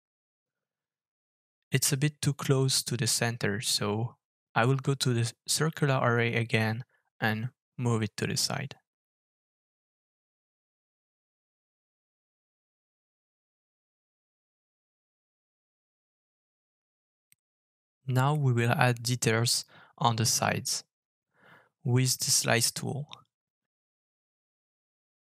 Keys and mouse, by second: 14.8 middle drag, 15.9 alt+f, 16.8-18.8 middle drag, 19.4 middle drag, 22.2 alt+f.